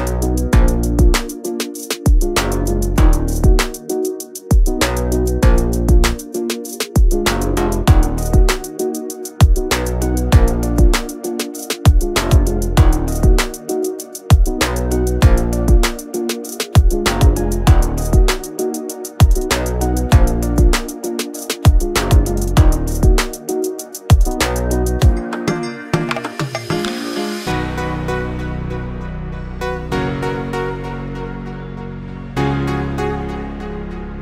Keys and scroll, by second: 3.1-4.7 typing, 10.5-13.2 typing, 14.7 r, 15.7 space, 16.1 p, 23.9 space, 25.2 Escape, 29.5 r, 31.4-33.4 typing.